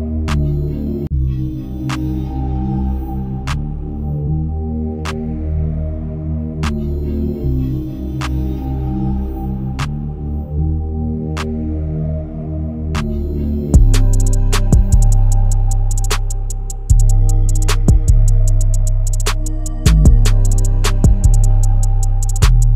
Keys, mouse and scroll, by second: 1.1-1.6 scroll down 1, 2.8 click, 3.1-3.5 scroll up 1, 3.5-3.8 scroll down 1, 3.8-5.0 drag, 5.0 right click, 5.2 click, 5.3 scroll down 1, 5.6-6.0 scroll up 1, 6.8 click, 7.1 scroll up 1, 7.9 click, 9.3 click, 9.6-10.2 scroll down 2, 9.8 Escape, 10.2 scroll up 1, 10.4 space, 10.8-12.6 drag, 12.6 right click, 12.8-13.5 scroll down 1, 13.5 click, 14.9 scroll down 1, 15.1-15.4 scroll up 1, 16.9 click, 17.2 scroll up 1, 17.5-18.7 drag, 18.7 Delete, 18.9-19.3 scroll up 1, 19.3 click, 19.6 Delete, 20.1 click, 20.4 Delete, 20.5 scroll down 1, 20.7 click, 21.5-21.9 scroll down 1, 22.2 click.